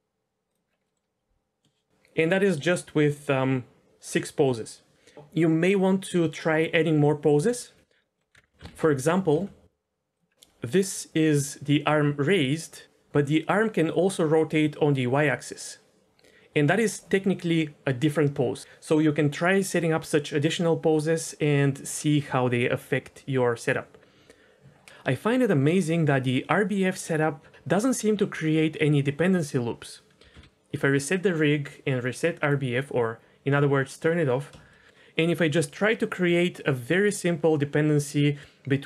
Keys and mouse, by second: 0.8 middle click, 7.6 KP_1, 8.3 KP_1, 8.3 KP_0, 8.7 alt+r, 9.3 r, 30.2 a, 30.4 alt+r, 32.3 click, 34.7 shift+middle drag.